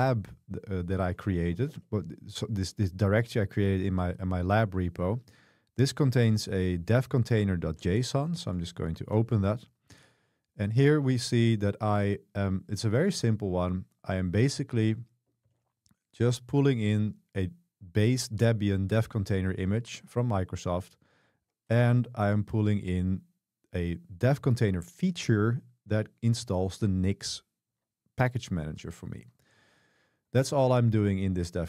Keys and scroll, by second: 0.0-2.0 typing, 7.6-9.0 typing, 9.2 Return, 10.6 typing, 13.8 j, 14.8 k, 15.5 shift+v, 20.0 Escape, 20.6 j, 21.0 j, 21.9 shift+v, 29.9 super+1.